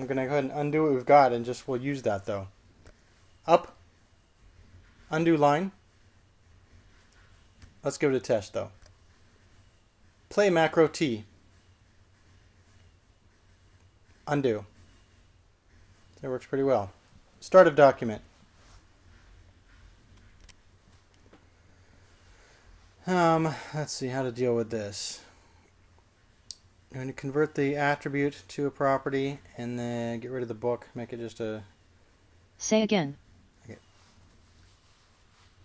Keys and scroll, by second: 4.5 k, 6.5 shift+u, 9.6 n, 12.0 typing, 15.6 u, 19.0 typing.